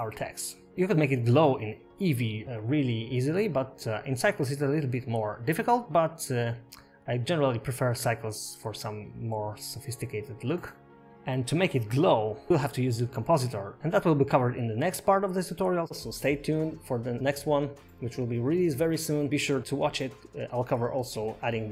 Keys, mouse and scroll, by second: 2.1 space.